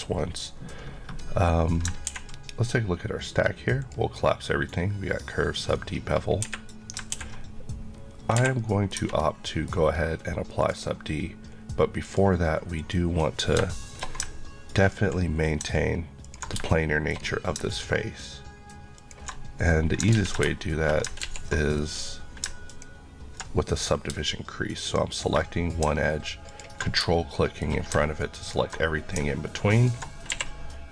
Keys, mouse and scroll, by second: 1.2-1.9 scroll down 1, 1.9 ctrl+scroll down 1, 3.8 click, 6.4 Escape, 8.4 Escape, 8.6 middle click, 9.0 Tab, 9.5 middle click, 10.6 click, 13.7 shift+middle click, 14.8 ctrl+click, 16.3 ctrl+Left, 16.7 shift+middle click, 19.0 ctrl+click, 20.1 ctrl+z, 21.2 ctrl+z, 22.7 ctrl+click, 27.1 shift+middle click, 28.5 ctrl+click, 28.5 click, 29.8 ctrl+click, 30.3 q.